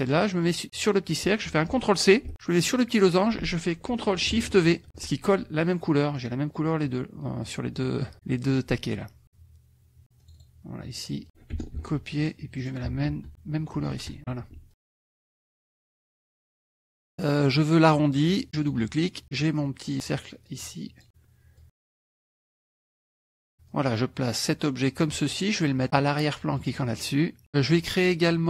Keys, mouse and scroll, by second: 0.5 click, 2.3 ctrl+c, 2.7 click, 4.3-5.5 ctrl+shift+drag, 4.9 ctrl+shift+v, 10.3 click, 11.8 ctrl+c, 12.7 ctrl+click, 13.8 ctrl+shift+v, 14.7-15.8 ctrl+drag, 16.4 ctrl+F1, 16.6 ctrl+KP_Subtract, 17.1 click, 18.5 click, 19.9 click, 20.5 click, 21.6-22.9 drag, 23.7-25.2 drag, 26.6 click.